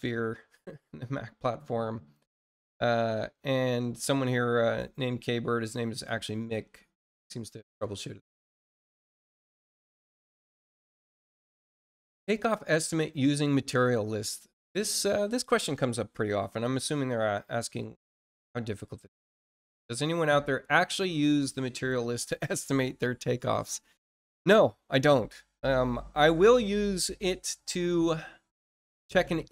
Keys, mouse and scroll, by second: 0.8-1.1 scroll down 2, 6.9 scroll up 2, 8.5 click, 10.6 scroll down 2, 13.3 click, 18.4 scroll down 1.